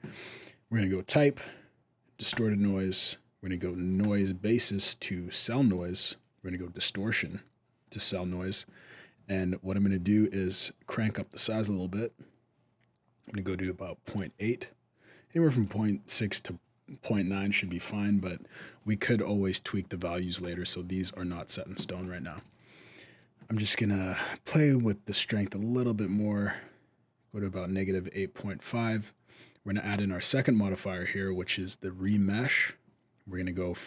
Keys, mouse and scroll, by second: 0.9 click, 3.8 click, 6.7 click, 10.0 shift+click, 20.2 click, 20.9-21.6 scroll up 2, 21.8 shift+middle click, 23.3 middle click, 24.8 shift+click, 29.7 click.